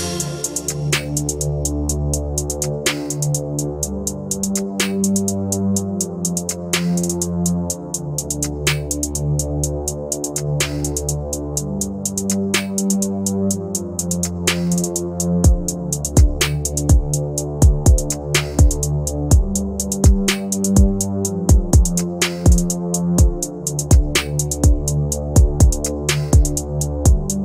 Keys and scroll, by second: 3.9 F2, 4.5 F4, 6.6 F3, 10.1 Delete, 18.3 shift+F2.